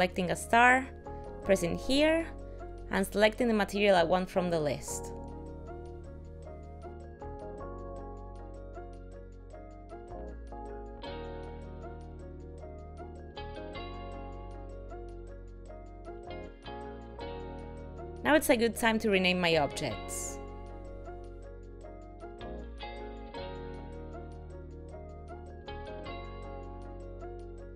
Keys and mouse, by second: 0.4 click, 3.0 click, 7.8 click, 9.8 click, 13.4 click, 15.0 click, 18.1 click, 18.4 click, 19.7 click, 19.9 click, 20.4 click, 20.7 click, 20.9 click, 21.3 click, 21.5 click, 21.7 click, 22.2 click, 22.4 click, 22.5 click, 23.1 click, 23.2 click, 23.4 click, 24.3 click, 24.6 click, 25.6 click, 25.8 click.